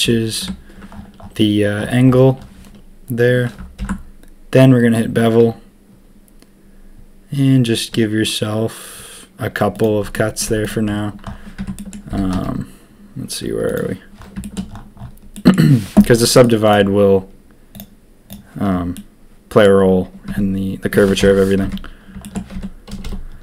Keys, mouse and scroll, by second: 3.8 ctrl+b, 10.1 click, 10.4 z, 11.5 Tab, 11.7 drag, 12.1 g, 14.4 shift+drag, 15.3 click, 16.0 drag, 16.4 click, 17.7 click, 18.2 click, 18.9-19.6 drag, 20.2 Tab, 21.2 ctrl+KP_3, 21.6 Tab, 22.5 Tab, 22.9 a, 23.0 a.